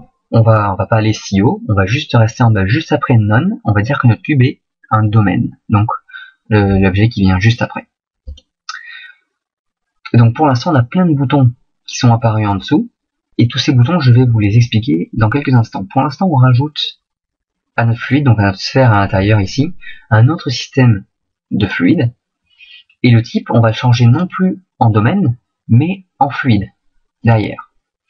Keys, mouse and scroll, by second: 18.0 right click.